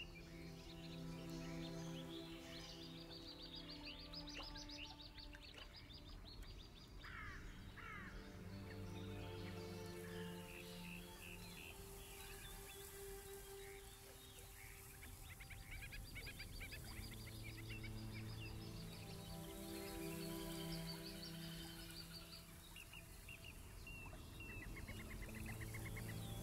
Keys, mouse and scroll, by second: 0.0-1.3 drag, 5.6 click, 7.0 click, 10.1 click, 11.2-12.7 drag, 13.2-14.8 alt+drag, 16.2 alt+scroll up 1, 17.1 click, 18.8 click, 20.6 click, 22.2 alt+click, 23.1 alt+scroll down 2, 23.5 alt+middle click, 24.4 alt+click, 24.9 alt+scroll down 3, 25.1 alt+scroll up 1, 25.5-26.4 drag.